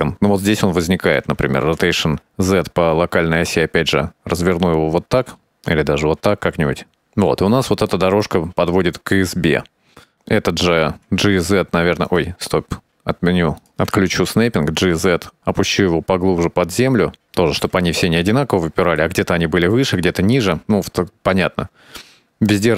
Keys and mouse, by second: 1.6 right click, 2.3 r, 8.3 alt+a, 11.8 g, 13.5 drag, 14.2 g, 18.1-19.9 middle drag, 20.4 alt+a.